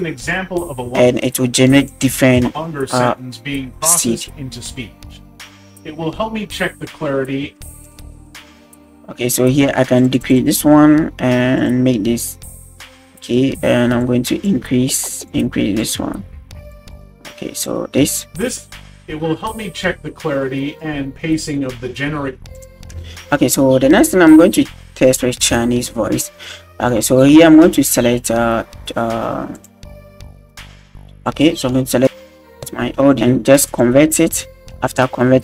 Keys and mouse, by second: 0.9 space, 1.8 click, 2.4 space, 7.5 space, 7.8-17.7 drag, 18.0 space, 18.5-21.1 drag, 22.2 space, 22.5 click, 23.0 space, 28.4 click, 29.5 click, 31.2 click, 33.7 click.